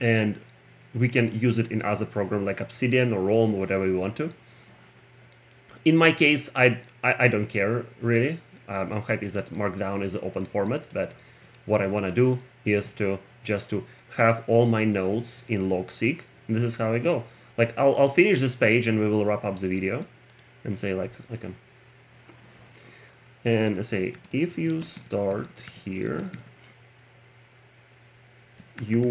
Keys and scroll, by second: 23.9-26.9 typing, 28.8 x.